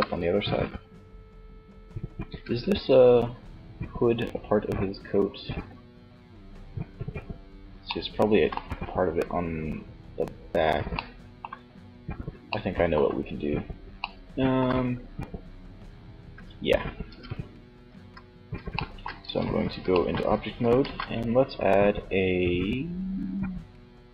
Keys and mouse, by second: 1.7 z, 2.2 middle click, 16.3 Tab, 17.1 z, 18.4 Tab, 19.9 shift+a.